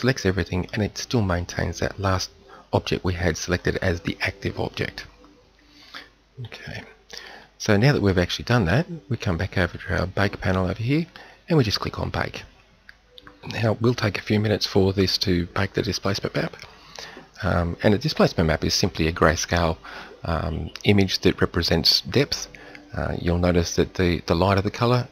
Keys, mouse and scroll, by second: 3.6-6.4 middle drag, 6.4 KP_7.